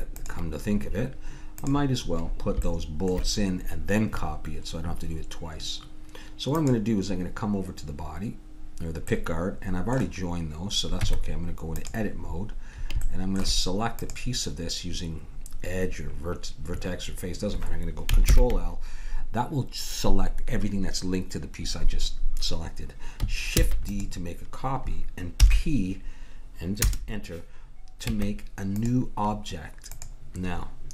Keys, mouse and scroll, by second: 1.6-3.7 drag, 6.5-8.5 drag, 11.0 Tab, 12.4-14.0 middle drag, 14.0-15.8 drag, 18.3 ctrl+l, 23.6 shift+d, 25.4 p, 28.1 Tab, 29.9-30.9 drag.